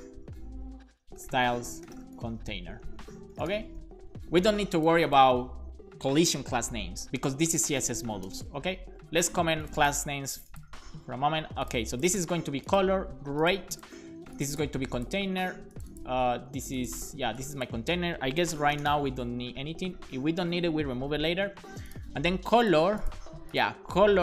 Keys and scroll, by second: 1.3-4.0 typing, 7.6 super+Left, 8.0 /, 8.1 /, 8.3 space, 8.5 super+s, 18.3-19.4 typing, 19.5 Down, 19.7 Down, 20.1 Up, 20.4 Up, 21.1 super+s.